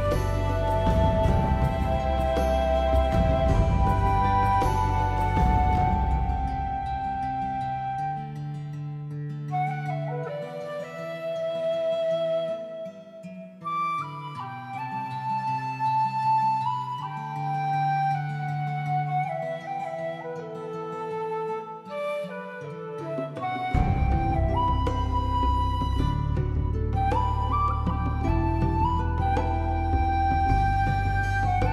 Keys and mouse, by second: 0.2 ctrl+z, 0.3 shift+middle click, 0.6 s, 0.8 click, 0.9 g, 1.5 click, 1.8 Tab, 1.9 shift+middle click, 2.3 shift+middle click, 2.7 Tab, 2.9 middle click, 3.3 middle click, 3.7 middle click, 4.3 alt+click, 4.4 alt+click, 4.6 alt+click, 4.8 alt+click, 5.1 g, 5.4 click, 5.8 shift+middle click, 6.4 shift+middle click, 6.9 shift+middle click, 7.2 click, 7.6 g, 8.0 click, 8.3 g, 8.6 click, 9.0 g, 9.2 click, 9.4 middle click, 10.0 alt+middle click, 10.2 middle click, 10.4 shift+middle click, 10.8 click, 11.0-12.8 typing, 11.4 click, 12.0 click, 12.6 right click, 13.1 click, 13.2 alt+middle click, 13.4 middle click, 14.9 click, 14.9 g, 15.2 middle click, 16.3 middle click, 16.7 shift+middle click, 16.9 middle click, 17.1 middle click, 17.5 click, 17.6 middle click, 17.8 g, 18.0 middle click, 18.5 click, 18.7 middle click, 19.1 Tab, 19.2 middle click, 19.5 alt+middle click, 19.7 alt+click, 20.0 shift+middle click, 20.3 Tab, 20.5 shift+middle click, 20.8 alt+z, 21.0 alt+z, 21.4 3, 21.9 2, 22.2 g, 22.6 click, 23.0 middle click, 23.5 middle click, 24.4 shift+middle click, 24.7-26.1 middle drag, 26.3 shift+middle click, 26.6 ctrl+r, 27.0 middle click, 27.6 middle click, 27.7 click, 28.1 alt+click, 28.2 alt+click, 28.4 shift+click, 28.6 1, 28.8 alt+z, 28.9 click, 29.1 shift+middle click, 29.5 click, 29.7 g, 30.6 shift+middle click, 31.0 middle click, 31.2 alt+z, 31.3 alt+middle click, 31.4 alt+middle click, 31.6 alt+middle click.